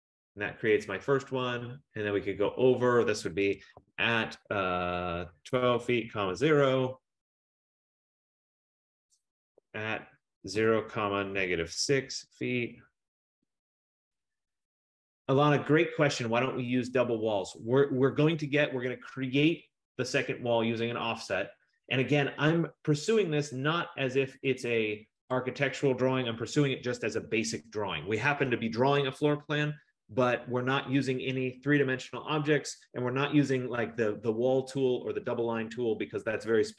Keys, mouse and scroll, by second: 0.1 F15, 0.5-1.0 scroll, 0.8 typing, 3.7-6.8 typing, 9.4-12.0 typing, 13.3-14.1 typing, 18.0 Return, 23.5 middle click, 24.7 click, 25.4 click.